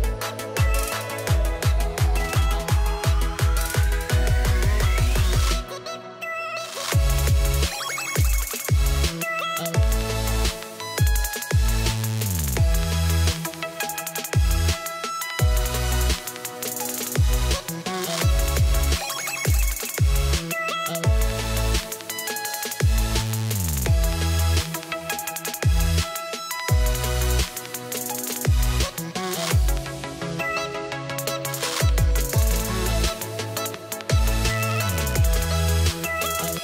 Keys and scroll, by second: 21.1 shift+l, 21.3 shift+o, 22.0 o, 22.1 g, 22.7 Return.